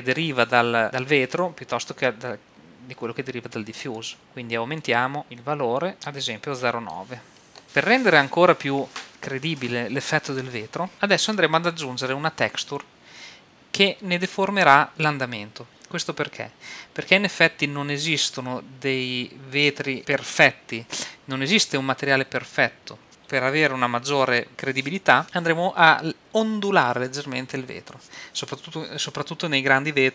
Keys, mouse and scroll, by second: 4.8 click.